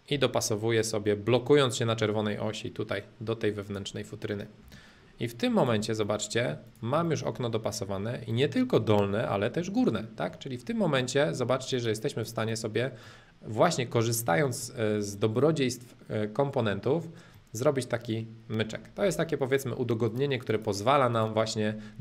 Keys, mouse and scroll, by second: 1.2 Right, 3.6 click, 4.4 middle click, 4.6 space, 5.0 middle click, 5.6 click, 6.0 middle click, 6.6 click, 7.0-9.0 middle drag, 9.4-11.6 shift+middle drag, 11.6-13.0 drag, 13.0-17.1 middle drag, 17.2-19.3 middle drag, 20.0-22.0 drag.